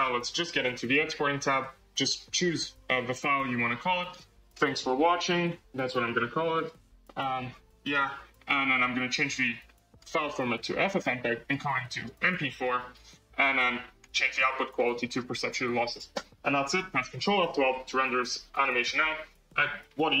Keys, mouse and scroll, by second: 0.7-8.9 drag, 8.9 BackSpace, 10.7-20.2 drag.